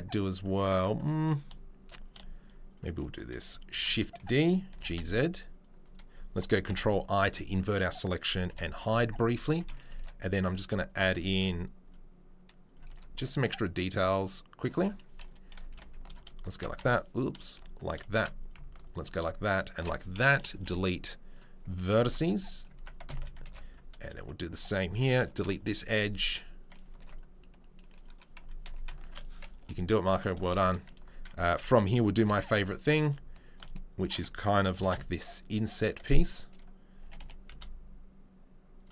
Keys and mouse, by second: 3.7 shift+d, 4.7 g, 6.7 ctrl+i, 8.5 h, 9.9 ctrl+r, 10.0 middle click, 10.6 3, 10.8 click, 10.9 middle click, 11.3 ctrl+r, 11.4-12.8 middle drag, 12.9 ctrl+r, 13.0-16.0 middle drag, 15.7 2, 16.0 right click, 16.1 middle click, 16.5-18.0 alt+middle drag, 18.2 middle click, 18.5 alt+middle click, 19.8-21.9 middle drag, 20.5 Delete, 22.0 ctrl+r, 23.1 ctrl+z, 23.4 ctrl+r, 25.5 Delete, 27.0 ctrl+r, 28.1 2, 28.6 2, 29.1-30.5 middle drag, 29.6 Delete, 30.5 shift+click, 30.7 middle click, 30.9 ctrl+click, 31.3 alt+right click, 31.5 middle click, 31.8 ctrl+click, 32.2 ctrl+b, 32.2 middle click, 33.1 alt+right click, 34.1-38.9 ctrl+alt+middle drag, 34.7 ctrl+b, 37.0 g.